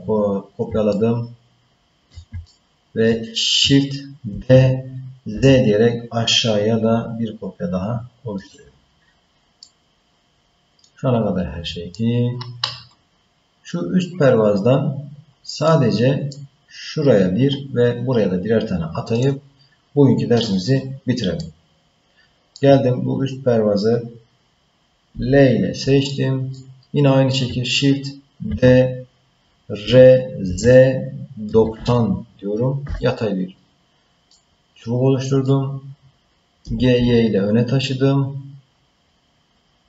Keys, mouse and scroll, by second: 0.9-2.1 ctrl+middle drag, 2.4 shift+middle click, 4.3 shift+d, 9.6-11.9 middle drag, 15.7 middle click, 19.2 click, 21.4-22.5 middle drag, 25.1 l, 26.1 middle click, 28.4 shift+d, 34.3-35.4 middle drag, 36.6 g.